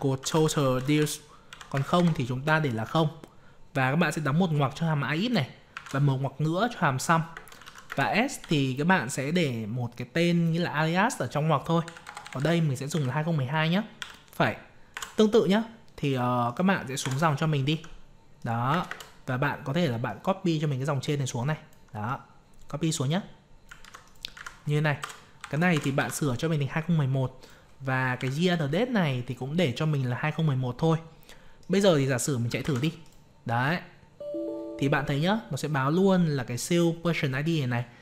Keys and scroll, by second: 23.8 ctrl+c, 24.3 ctrl+v, 32.6 ctrl+c.